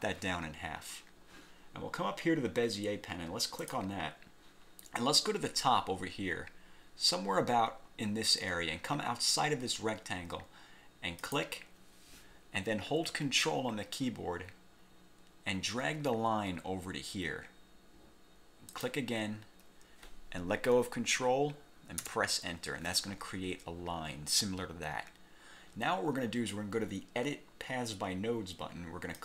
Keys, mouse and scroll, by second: 3.8 click, 11.3 click, 18.8 ctrl+click, 22.1 Return.